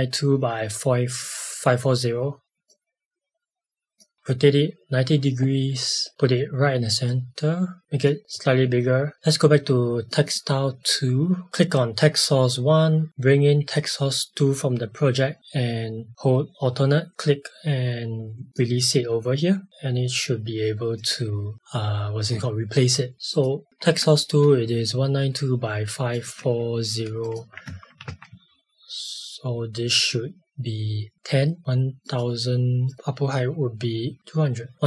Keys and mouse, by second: 2.4 r, 2.7 click, 6.1 click, 9.1 click, 20.9 click, 23.8 ctrl+k, 26.1 click, 26.3 Escape, 27.2 click, 27.6 Tab, 28.0 Left, 28.2 space, 29.8 click, 31.1 Tab, 32.0 click, 34.2 Return.